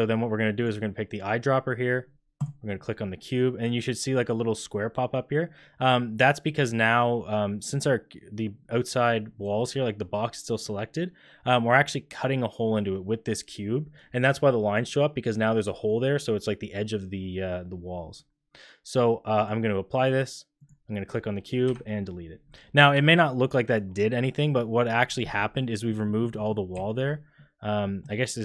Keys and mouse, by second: 0.5 click, 19.5 click, 21.6 Delete, 26.0 click, 26.2 middle click, 26.7 z, 27.3 click.